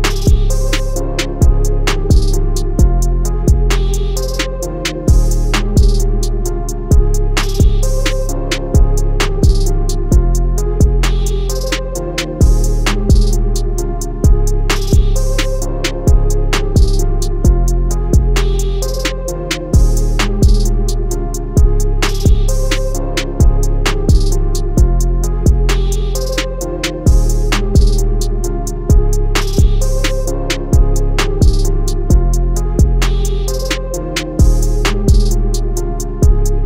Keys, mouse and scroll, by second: 1.6 click, 3.5 alt+shift+click, 5.6 click, 8.3 alt+shift+click, 10.0 click, 27.5 click.